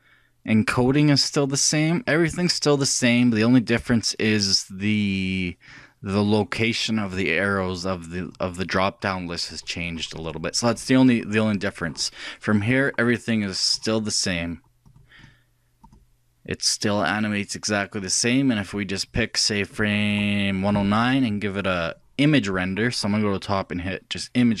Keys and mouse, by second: 3.3-10.2 drag, 12.9-14.8 drag, 14.9-17.7 drag, 20.1-21.9 drag, 22.8-24.6 drag.